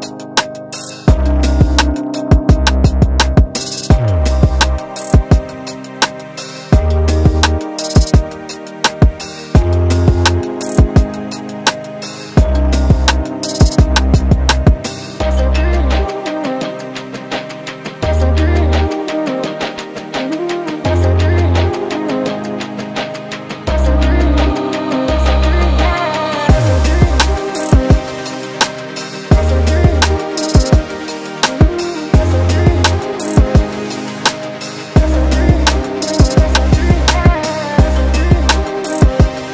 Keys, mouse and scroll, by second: 0.4-0.8 scroll down 3, 0.7-1.2 scroll up 5, 1.1 click, 2.3 click, 4.1 alt+click, 4.5 alt+right click, 4.9 click, 5.1 right click, 5.7 click, 5.9 middle click, 6.8-7.2 scroll up 3, 7.7 click, 13.9 click, 15.3 click, 16.6 click, 18.0 click, 19.5 click, 20.7 click, 20.8 scroll down 3, 20.9-21.3 scroll up 4, 21.3 scroll down 1, 21.5 scroll down 5, 21.8 alt+click, 22.1 right click, 22.8 right click, 23.3 alt+click, 23.7 ctrl+right click, 24.3 shift+middle click, 24.9 shift+right click, 25.5 middle click, 26.3 scroll up 1, 26.8 click, 27.8 click, 31.8 click, 32.3 KP_0, 32.5 KP_Decimal, 33.3 alt+middle click, 34.0 middle click, 35.2 middle click, 35.6 middle click, 36.0 middle click, 36.5 middle click, 37.3 scroll up 2, 38.1 click, 39.1 scroll up 1, 39.4 middle click.